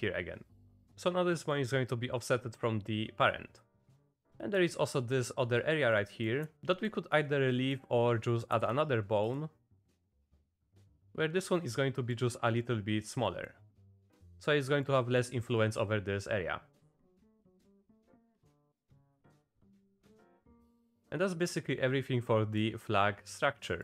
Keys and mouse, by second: 0.7 click, 0.9 ctrl+z, 1.5 click, 3.4 click, 4.3 click, 5.9 click, 6.7 middle click, 7.6 middle click, 8.6 shift+d, 10.4 click, 11.5 click, 12.7 click, 13.4 click, 13.9 click, 14.9 click, 15.7-17.0 drag, 17.1 click, 18.0 click, 18.5 click, 19.8 click, 20.6 click, 21.0-22.5 shift+drag, 22.6 click.